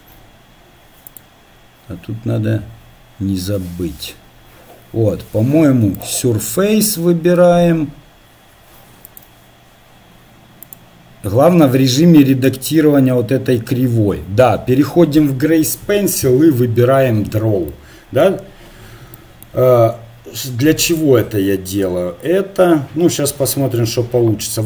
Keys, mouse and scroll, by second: 1.2-5.0 right drag, 6.0-17.7 drag, 17.7-19.4 middle drag, 20.0-23.1 middle drag, 24.4 a.